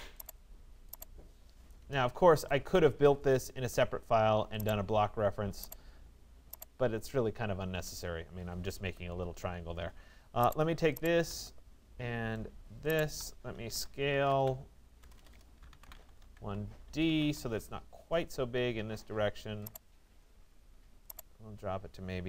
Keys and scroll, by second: 1.4 Return, 7.3 Return, 14.6-17.1 typing, 17.3 Return.